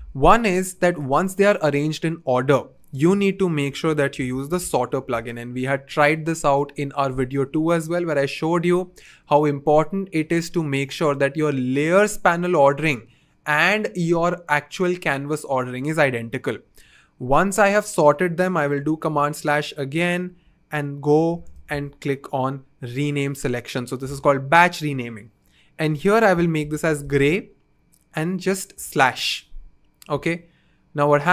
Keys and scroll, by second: 3.8 super+/, 3.9-4.8 typing, 6.2 typing, 19.0 super+/, 21.0-22.8 typing, 26.3-27.6 typing, 28.7 typing.